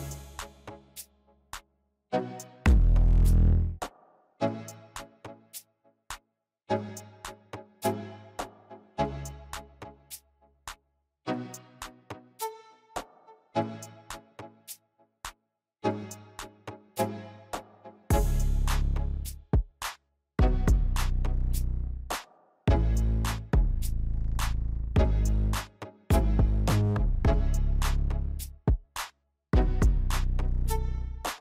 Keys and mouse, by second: 2.5 middle click, 5.6-7.9 middle drag, 8.8 middle click, 12.1 shift+d, 15.8 p, 17.9 Tab, 20.2 click, 20.8 click, 21.7 click, 22.4 Tab, 24.2 shift+z, 25.4 Tab, 27.8 click, 31.1 click.